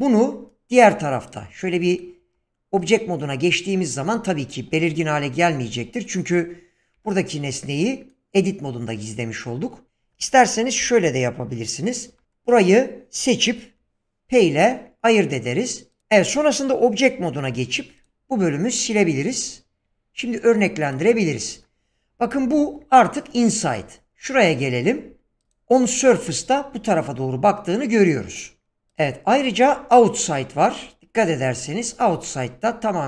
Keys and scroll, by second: 2.2 Tab, 7.0 Tab, 12.1 alt+h, 13.7 p, 17.5 x.